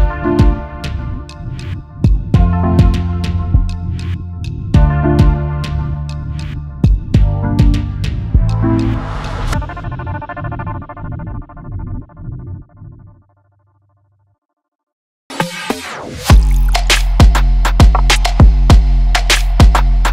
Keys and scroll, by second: 14.0 space, 14.0 space.